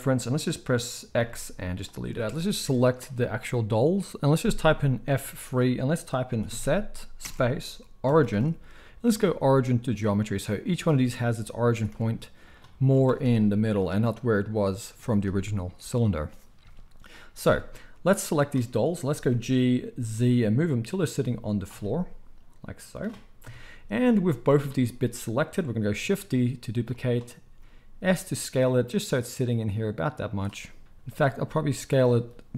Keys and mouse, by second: 1.1 x, 2.3-10.8 drag, 2.6 KP_1, 5.2 F3, 11.7 r, 12.8 click, 13.0 r, 18.2-21.6 drag, 19.3 g, 21.8-24.0 middle drag, 23.4 KP_1, 24.2 z, 26.2 shift+d, 27.4 s.